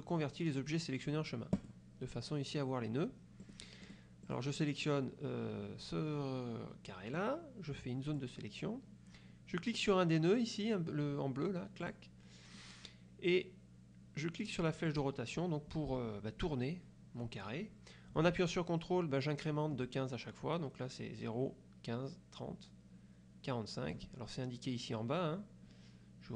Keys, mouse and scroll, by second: 1.7 click, 3.5 click, 3.9 click, 4.3 click, 7.3-8.5 drag, 11.9 click, 14.9-24.3 drag.